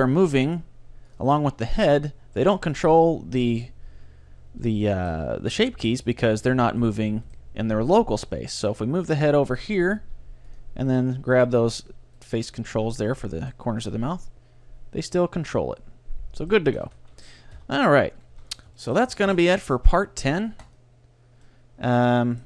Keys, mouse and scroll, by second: 0.6 r, 1.4 r, 3.0-6.7 middle drag, 6.3-15.4 right drag, 10.0 r, 13.9 g, 16.8 a, 17.0 a, 17.6 alt+r, 18.4 a, 18.6 middle click, 18.8-20.7 middle drag, 19.3 ctrl+s, 21.5-22.4 middle drag.